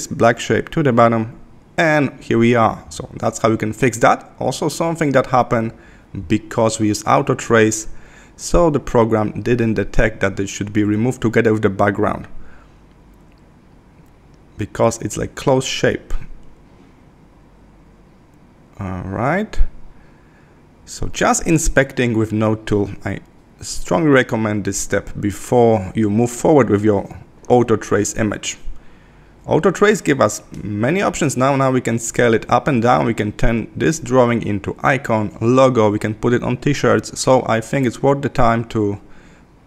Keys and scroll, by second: 9.5 Left, 29.9 Escape, 30.5 Escape, 32.1 super+-.